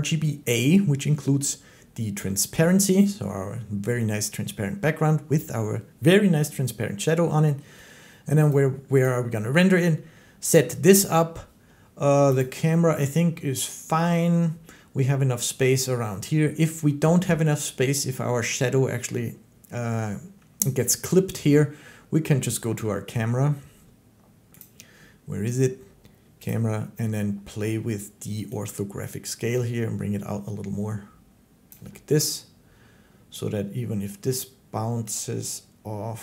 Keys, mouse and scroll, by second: 8.3 click, 8.9 click, 12.2 click, 15.1-16.9 drag, 16.9 middle click, 24.4 click, 26.3 click, 30.4-31.4 drag, 31.5-34.9 drag.